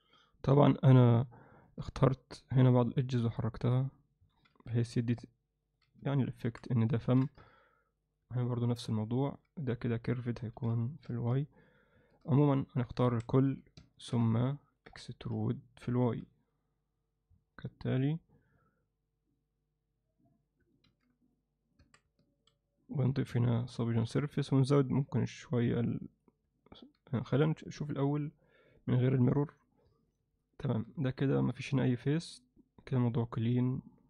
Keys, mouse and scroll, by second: 1.0 Tab, 1.7 z, 4.4 g, 5.9 z, 6.4 Tab, 7.0 ctrl+alt+middle click, 8.4-9.4 middle drag, 10.6 g, 12.4 Tab, 13.1 a, 13.8 ctrl+alt+click, 14.6 ctrl+middle click, 15.4 e, 20.9 ctrl+r, 21.8 Tab, 22.2 middle drag, 22.7-23.7 right drag, 23.9 ctrl+middle click, 26.6-27.0 alt+middle drag, 27.2 middle drag, 27.9 KP_Divide, 30.1-30.8 middle drag, 31.1 alt+middle click, 33.7-34.0 alt+middle drag.